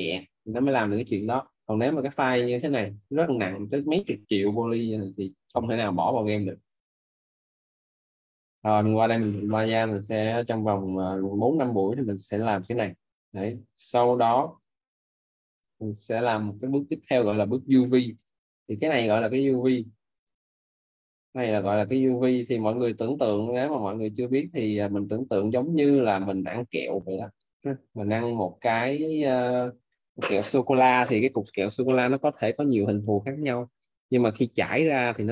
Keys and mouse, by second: 0.8 Escape, 8.8 click, 14.2 alt+Tab, 18.1 click, 28.8 click.